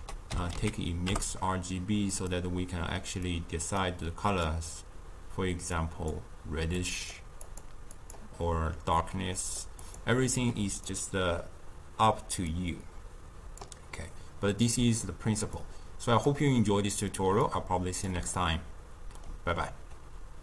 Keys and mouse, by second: 3.1-4.6 drag, 7.4-8.0 drag, 9.7 click, 10.3 click, 12.4-18.2 drag, 18.2-20.4 ctrl+middle drag.